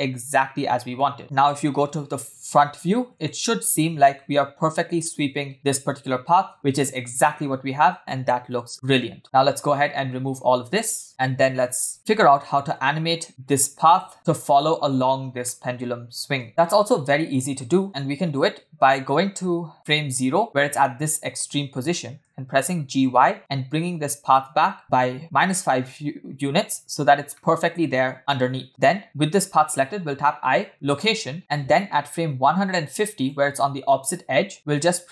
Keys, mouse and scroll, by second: 0.4 scroll up 1, 0.7 shift+middle click, 1.1 scroll up 1, 1.2 space, 1.5 space, 1.7 KP_1, 2.8-3.2 scroll up 1, 3.3 shift+middle click, 3.5-3.9 scroll up 3, 4.0 space, 9.2 scroll down 5, 9.3-9.8 shift+middle drag, 9.9-11.0 scroll down 3, 11.1 ctrl+e, 11.1 ctrl+click, 11.9 scroll up 4, 12.0 shift+middle click, 12.8 Tab, 13.1 middle click, 13.3 Tab, 13.9 w, 15.2-16.2 scroll down 2, 15.5-16.2 middle drag, 16.4 space, 16.5 space, 18.0-19.1 drag, 19.9 scroll up 3, 20.4 shift+middle click, 22.2 g, 24.8-27.0 middle drag, 27.3-28.1 shift+middle drag, 30.0 i, 31.4 x, 31.6 click, 34.9 g.